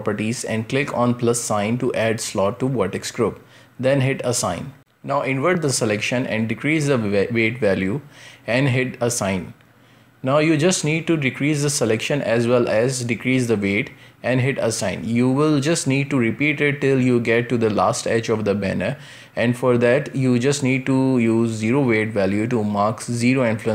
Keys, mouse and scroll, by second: 4.4 ctrl+i, 6.1-9.1 drag, 9.9-12.9 drag, 12.9 ctrl+KP_Subtract, 14.4-17.3 drag, 17.3 ctrl+KP_Subtract, 18.5-19.8 drag, 19.8-20.9 middle drag, 20.9 Tab, 23.1-23.7 drag.